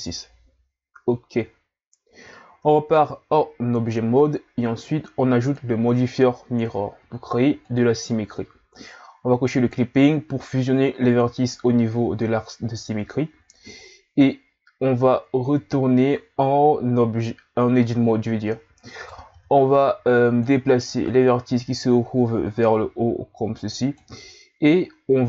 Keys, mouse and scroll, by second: 2.5 Tab, 5.4 click, 9.6 click, 15.5 Tab, 19.0 right click, 19.3 b, 21.0 click, 24.7-25.2 scroll up 1.